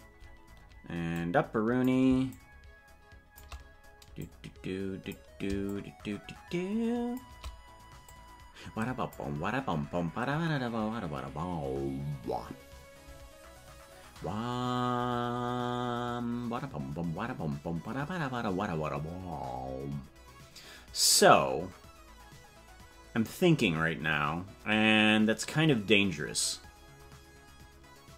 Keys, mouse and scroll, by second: 1.1 click, 2.2-3.3 shift+drag, 4.1 click, 5.6-7.1 shift+drag, 8.0-9.1 drag.